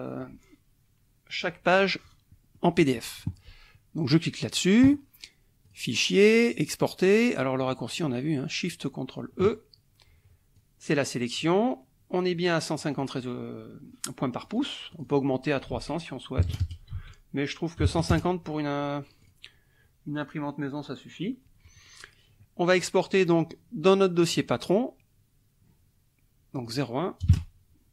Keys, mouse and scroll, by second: 2.6 middle click, 4.0 click, 5.6 click, 6.5 click, 7.6 click, 10.5 click, 12.8 click, 14.4 click, 14.9 click, 15.8 ctrl+a, 16.4 KP_3, 16.5 KP_0, 16.9 ctrl+a, 17.8 KP_1, 17.9 KP_5, 18.1 KP_0, 19.2 click, 22.8 click, 24.2 click, 26.6 click, 27.2 KP_0, 27.3 KP_1.